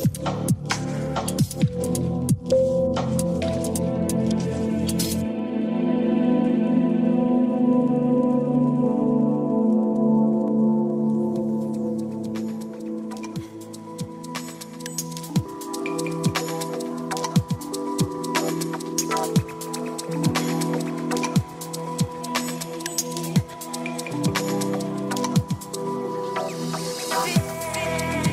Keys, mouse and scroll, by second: 1.2 click, 2.0 click, 3.8 click, 4.9 click, 6.1 click, 7.5 click, 9.4 click, 18.5 click, 19.9 click, 27.7-28.3 drag.